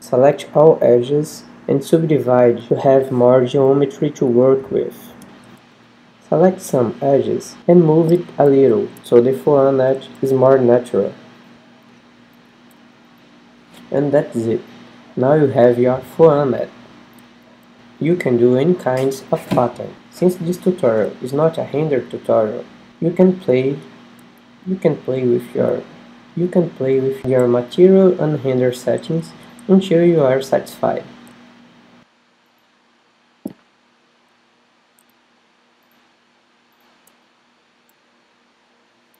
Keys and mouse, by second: 0.2-2.5 right drag, 0.7 g, 3.2 Tab, 4.7 Tab, 5.3 a, 6.2 l, 7.0 l, 7.7 KP_1, 8.9 shift+z, 10.3 g, 12.9 shift+z, 14.2 z, 14.7 middle click, 15.7 middle click, 15.9 middle click, 16.2 middle click, 16.6 middle click, 17.5 g, 18.5-20.6 drag, 20.9 click, 22.0 middle click, 22.7 Tab, 24.0 Tab, 25.0 a, 25.4 a, 26.0 w, 30.8 KP_7, 31.4 click, 32.2 middle click, 32.7-34.7 right drag, 36.1-39.1 right drag.